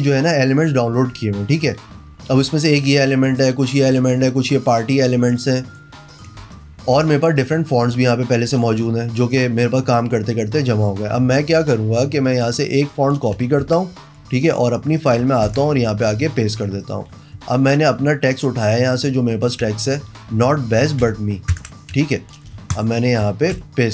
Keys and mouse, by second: 0.0 click, 1.5 click, 2.3-2.7 drag, 3.1-3.4 drag, 3.9 click, 4.3-4.7 drag, 5.3-5.8 drag, 6.1 click, 6.4 space, 6.6 click, 7.4 click, 7.9 click, 8.5 click, 9.4 click, 10.0 click, 10.5 click, 12.8 click, 13.6 ctrl+c, 14.4 click, 15.0 click, 15.5 ctrl+v, 16.2 click, 16.8 click, 17.4 t, 19.0 click, 21.0 ctrl+c, 21.5 ctrl+KP_Enter, 22.0 a, 22.5 t, 22.7 click, 23.6 ctrl+v.